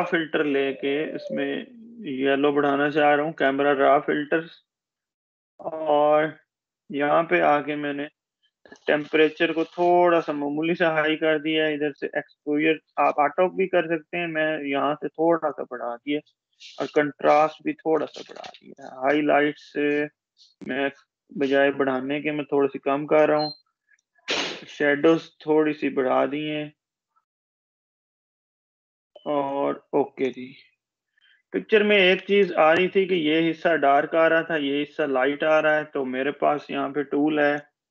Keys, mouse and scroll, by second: 0.4 click, 1.2 space, 1.3 click, 9.0-9.4 drag, 32.8-33.2 space, 37.2-37.9 drag.